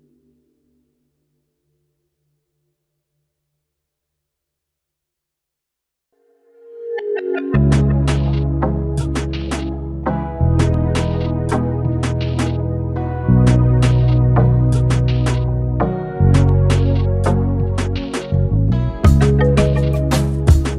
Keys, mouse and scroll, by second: 0.0 scroll up 5, 0.2 click, 0.7-1.6 scroll down 17, 2.0-2.3 middle drag, 2.3 click, 3.3 drag, 3.8 s, 4.6 click, 5.0 scroll down 1, 5.3-7.6 middle drag, 7.6 shift+a, 9.3 r, 11.3 alt+middle click, 11.7 scroll up 3, 12.1-13.7 shift+middle drag, 17.5 Tab, 18.1-20.0 typing.